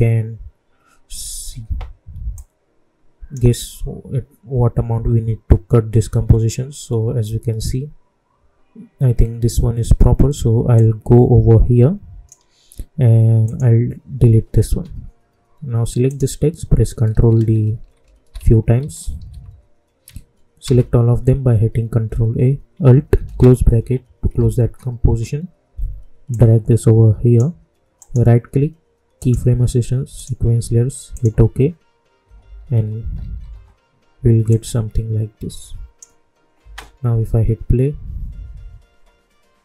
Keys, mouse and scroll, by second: 2.3-10.7 drag, 10.7-13.4 drag, 16.0 click, 17.0 ctrl+d, 26.2 typing, 26.2-27.9 drag, 27.9 right click, 29.1 click, 32.2-33.1 typing, 34.4-36.5 drag, 36.5 space.